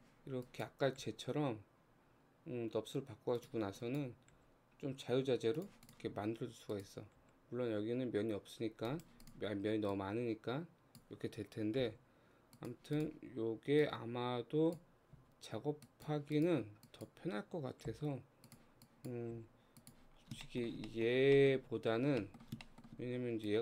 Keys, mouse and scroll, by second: 0.5 click, 1.0 g, 3.8 click, 4.4 g, 5.9 click, 6.7 click, 7.2 g, 9.2 click, 10.0 click, 11.8 x, 13.0 click, 13.8 click, 15.1 x, 16.4 click, 17.9 g, 18.9 click, 19.3 g, 20.1 scroll down 3, 20.5 shift+middle click, 21.1-21.4 scroll up 1, 21.4-23.0 middle drag, 23.0-23.5 scroll up 2, 23.5 click.